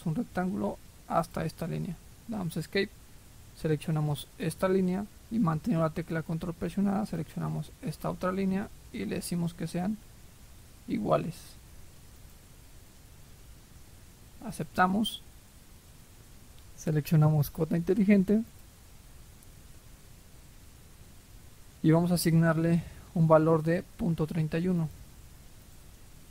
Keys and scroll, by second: 2.0 Escape.